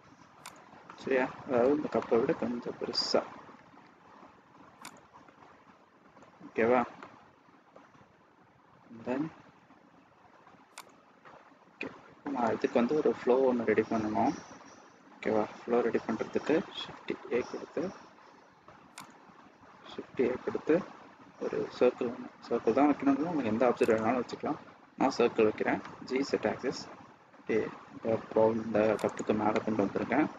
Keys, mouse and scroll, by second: 0.8 middle click, 3.5 s, 5.1 middle click, 5.8 scroll down 1, 5.9 middle click, 6.4-6.8 scroll up 2, 6.9 middle click, 8.8 s, 11.1 middle click, 11.7 middle click, 16.8 shift+a, 18.9 click, 19.6 shift+a, 29.4 middle click.